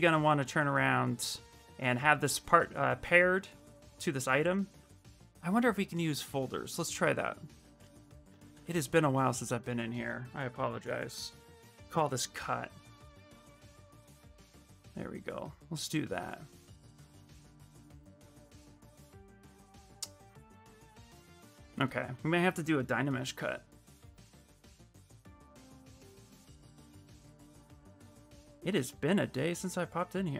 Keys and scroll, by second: 7.4 shift+m, 8.3 ctrl+f, 11.0-11.9 typing.